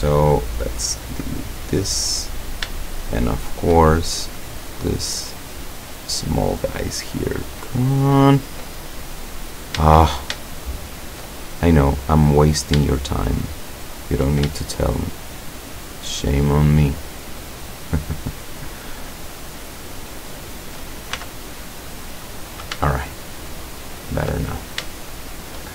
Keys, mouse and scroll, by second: 0.9 click, 2.3-2.7 scroll up 1, 2.9-3.8 shift+middle drag, 4.4 right click, 5.0 right click, 5.4 right click, 6.3 right click, 7.3 right click, 7.8 right click, 8.4 right click, 8.8-9.5 scroll up 2, 10.6 shift+middle click, 11.1 shift+middle click, 12.2 right click, 13.7 shift+right click, 14.7-15.6 shift+middle drag, 16.6 shift+right click, 17.1-17.7 shift+middle drag, 17.9-18.5 shift+middle drag, 18.6-19.3 shift+middle drag, 20.3 shift+right click, 21.2 shift+x, 21.5 shift+click, 22.0 shift+scroll down 1, 22.9 shift+click, 23.3 shift+click, 23.6 shift+click, 24.3 shift+click, 24.9-25.7 shift+middle drag.